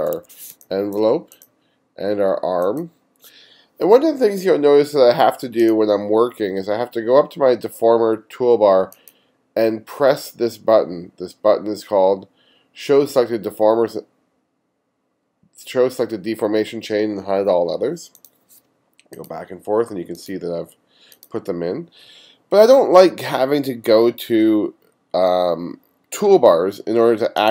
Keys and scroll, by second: 0.5 space.